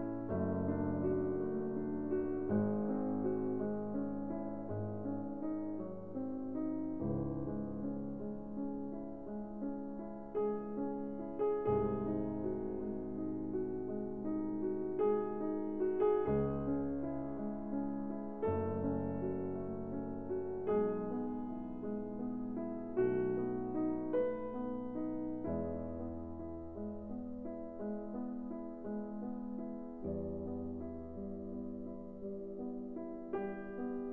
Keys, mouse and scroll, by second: 4.8 click, 6.1 right click, 7.4 click, 10.2 ctrl+scroll, 13.3-13.7 scroll, 14.0 scroll, 14.9 click, 16.7 s, 17.6 click, 19.1-20.2 scroll, 23.3-24.4 drag, 25.3 middle click, 25.5 scroll, 25.6 middle click, 26.5-27.6 drag, 28.6-29.6 drag, 31.8-32.2 typing, 33.0 Return.